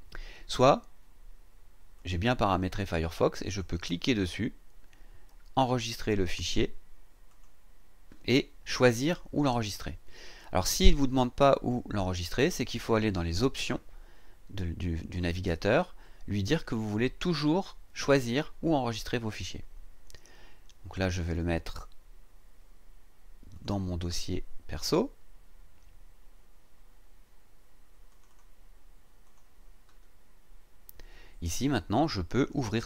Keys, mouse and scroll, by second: 2.0 click, 3.5 click, 7.3 click, 23.5 click, 28.1 click, 29.2 click, 32.4 click.